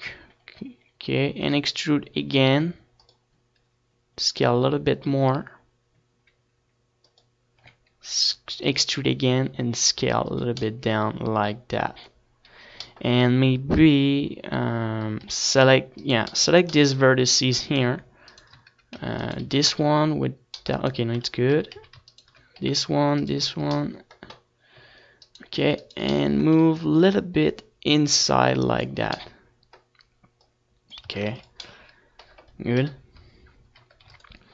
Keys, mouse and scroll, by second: 2.6 e, 4.4-6.3 drag, 4.8 s, 8.6-13.8 drag, 9.1 e, 11.0 s, 12.4-14.2 middle drag, 14.6-16.8 middle drag, 16.8 a, 17.4-22.2 right drag, 20.5 z, 20.8 c, 22.2-23.3 middle drag, 22.4 z, 22.6 z, 22.8 z, 23.3-24.7 right drag, 23.8 z, 24.7 middle click, 25.9 middle click, 26.5 right click, 26.8 middle click, 27.3 z, 28.8-29.8 drag, 31.0-32.5 drag, 31.8 Tab, 32.1 ctrl+s, 33.6 KP_1, 34.3 middle click.